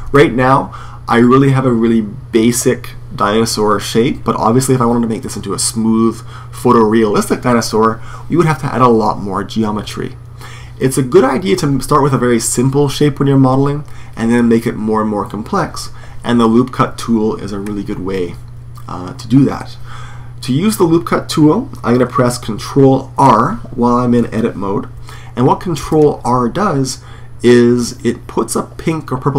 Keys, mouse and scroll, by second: 17.4-25.6 middle drag, 25.6 ctrl+r.